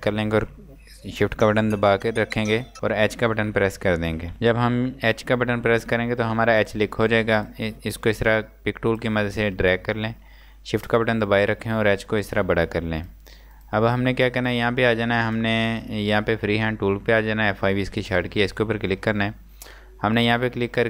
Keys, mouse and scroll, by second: 3.2 shift+h, 4.3 space, 5.2-6.0 scroll up 1, 6.0-6.5 scroll down 1, 6.5 click, 10.8 click, 12.6 click.